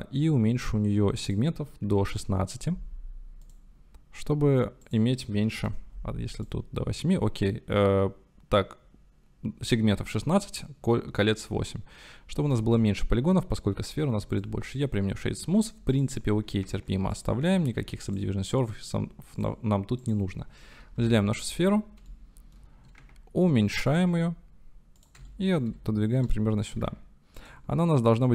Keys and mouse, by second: 1.5-3.6 drag, 4.9-6.8 drag, 11.4 click, 12.7-13.0 shift+drag, 14.3 click, 15.9-16.5 drag, 16.6 ctrl+s, 17.8 ctrl+2, 18.1-19.4 drag, 21.0 KP_7, 22.2 shift+click, 23.0 s, 25.0 g, 25.3-25.7 shift+drag, 26.4 shift+middle drag, 27.1 s, 27.4 click, 27.6 g.